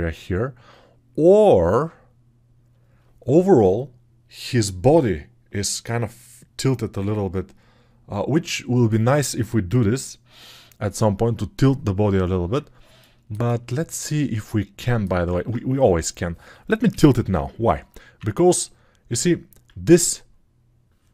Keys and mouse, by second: 16.8 g, 17.2-18.2 ], 17.7 click, 17.7 right click.